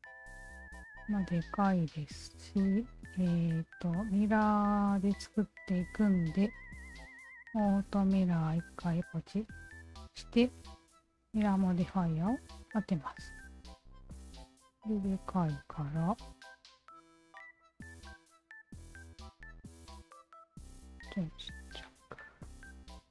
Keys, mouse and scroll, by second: 1.8 Tab, 1.9 alt+right click, 2.7 Tab, 5.6 alt+click, 6.2 alt+click, 7.1 alt+click, 8.8 alt+click, 10.7 alt+click, 12.0 Tab, 12.7-13.7 alt+drag, 14.1 alt+click, 15.0-16.1 alt+drag, 17.5-18.5 alt+drag, 18.8-20.7 alt+drag, 21.4 alt+click, 22.2 alt+click.